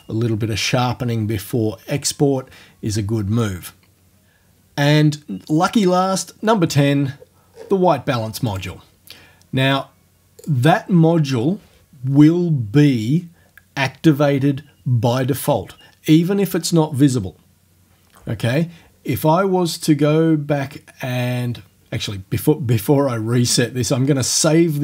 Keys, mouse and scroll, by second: 7.5-7.8 scroll down 2, 8.5 click, 10.4 click, 24.3 click.